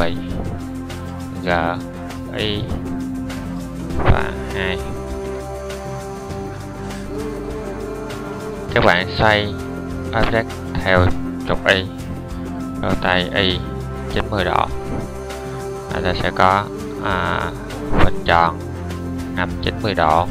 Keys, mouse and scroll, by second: 1.2 g, 12.3 r.